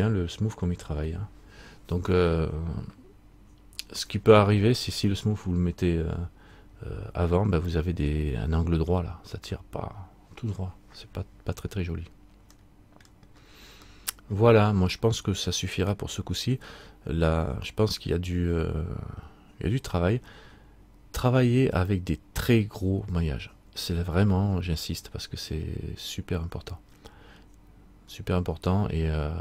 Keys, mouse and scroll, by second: 7.2-7.8 scroll up 1, 7.8 scroll up 1, 7.9 middle click, 11.9-12.7 scroll up 1, 12.7 scroll up 1, 12.7 middle click, 13.5-14.0 scroll down 1, 14.1 middle click.